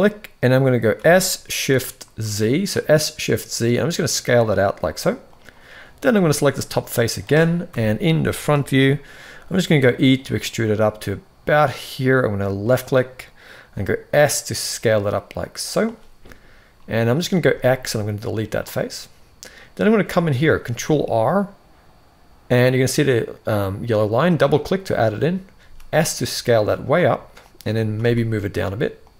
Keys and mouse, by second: 0.7 s, 6.3 middle click, 7.4 KP_1, 8.5 shift+middle click, 9.4 e, 13.3 s, 16.5 middle click, 17.1 x, 18.8 middle click, 20.4 ctrl+r, 25.3 s, 27.4 g.